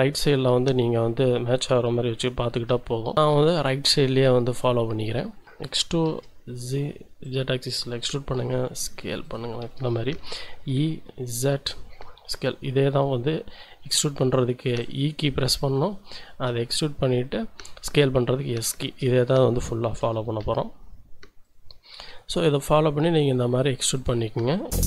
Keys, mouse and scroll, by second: 2.2 n, 3.0 scroll down 2, 3.1 shift+middle click, 3.7 shift+scroll up 2, 5.6 e, 6.1 z, 7.2-8.3 drag, 8.3 s, 9.2 click, 10.2 e, 10.7 z, 11.6 click, 12.3 s, 14.8 click, 15.0-15.6 scroll down 2, 15.9 shift+click, 18.5 shift+middle click, 20.1 e, 20.4 z, 21.4 click, 22.1 s, 24.0 click, 24.7 e.